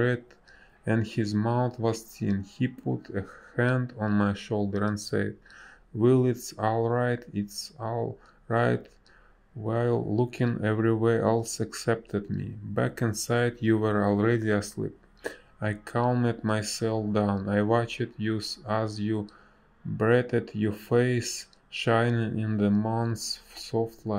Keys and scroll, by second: 3.7 ctrl+z, 9.5 space, 14.8 space, 16.2 ctrl+z, 16.6 ctrl+z, 17.0 space, 21.8 space.